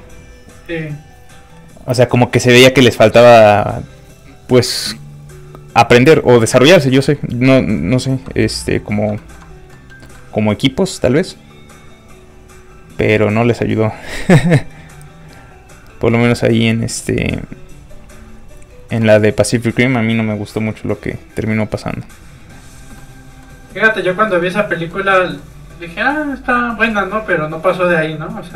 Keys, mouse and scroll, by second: 9.1 shift+middle click, 9.4 scroll up 1, 9.7 middle click, 9.9 scroll down 1, 10.0 middle click, 10.1 shift+middle click, 22.9 shift+middle click, 22.9 shift+click, 23.0 middle click, 26.7 click.